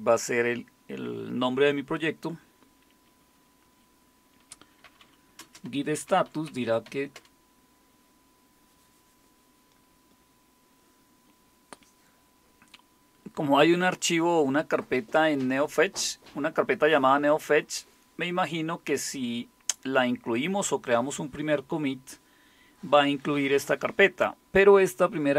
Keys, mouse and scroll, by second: 4.3-7.3 typing.